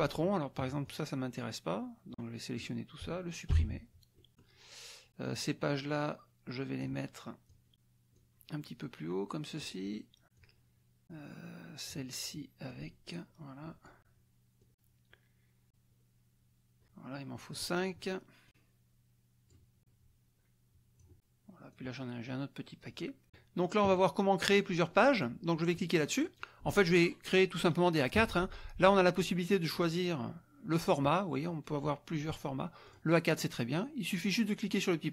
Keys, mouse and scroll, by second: 0.8-2.7 drag, 3.5 Delete, 4.1 click, 5.3-7.0 drag, 7.5 click, 8.1-9.7 drag, 9.9 click, 10.3-12.1 drag, 12.7-14.0 drag, 14.6 click, 15.7-17.7 drag, 18.5-19.7 drag, 19.8-21.2 drag, 21.7-23.5 drag, 26.1 click, 29.1 click, 32.9 click.